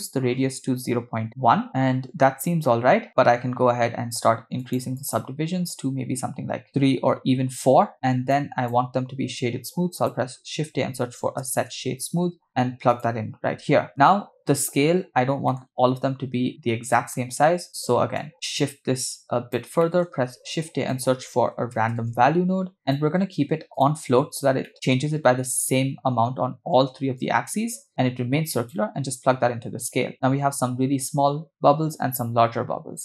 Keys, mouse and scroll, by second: 2.2 middle click, 3.0 shift+middle click, 4.6 click, 6.6 click, 8.4 click, 9.2 shift+a, 13.9 middle drag, 15.5 middle click, 15.6-16.6 scroll down 4, 16.7 scroll down 1, 17.0 middle click, 18.2 click, 18.6 click, 19.8 shift+middle click, 20.1 shift+a, 24.1 scroll up 2, 24.7 middle click, 27.2-29.1 drag.